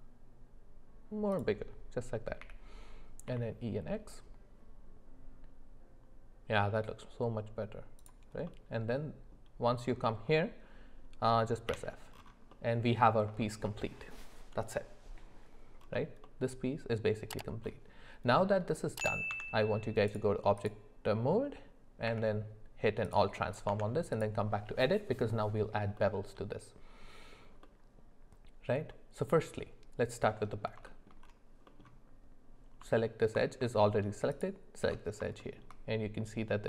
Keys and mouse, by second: 8.5 middle click, 11.7 f, 12.5 middle click, 13.4 shift+middle click, 18.4 middle click, 19.3 Tab, 20.6 click, 22.1 q, 23.7 Tab, 26.0 middle click, 27.6-28.9 middle drag, 30.3 middle click, 30.9 shift+middle click, 31.7 middle click, 34.3 alt+shift+click, 35.4 shift+middle click.